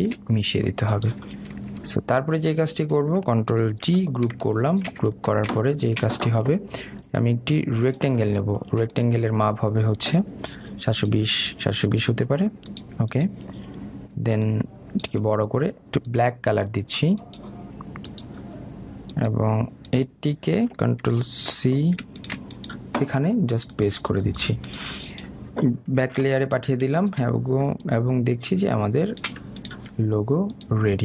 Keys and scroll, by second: 5.5 ctrl+g.